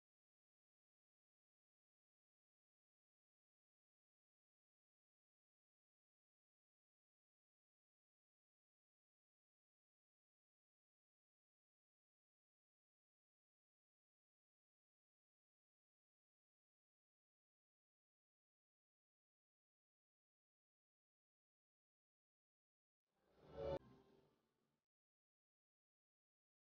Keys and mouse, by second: 4.7 click, 4.8 Tab, 7.4 click, 10.7 click, 12.6 click, 18.9 click.